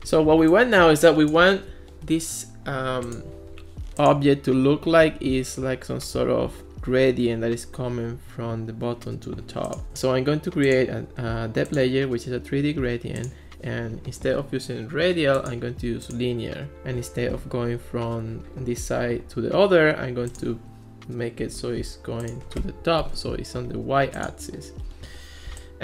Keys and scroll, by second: 21.4 1, 23.0 0, 23.2 Return.